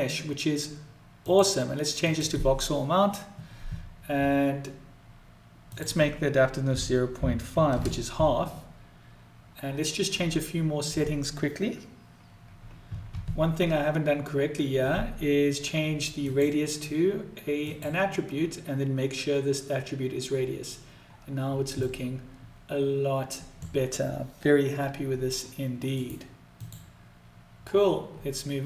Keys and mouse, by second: 1.1-2.2 drag, 5.6-8.6 drag, 15.8-17.6 drag, 21.5-23.2 middle drag, 25.7 right click.